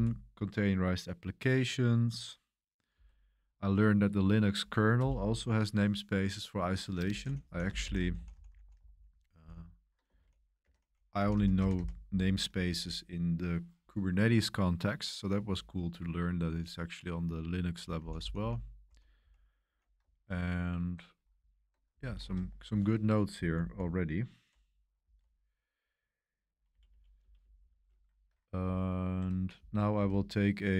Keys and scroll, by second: 2.9 Down, 4.9 Return, 7.2-12.2 typing, 14.0 typing, 17.7-22.2 typing, 22.0 super+y, 22.6 Return, 23.4 Page_Down, 25.0 Page_Down, 26.7 Page_Up, 26.8 Page_Up, 27.2 Page_Up, 27.4 Page_Up, 27.5 Page_Up, 28.1 Escape, 29.9 super+1, 30.1 super+1, 30.2 Escape, 30.2 super+1.